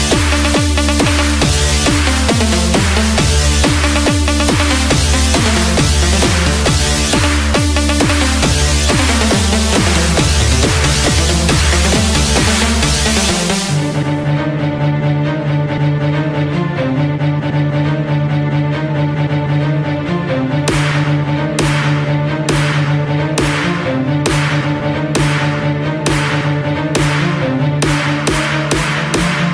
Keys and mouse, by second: 6.0-10.7 drag, 13.4 KP_4, 14.7 KP_4, 20.0-22.7 drag, 25.4 KP_6.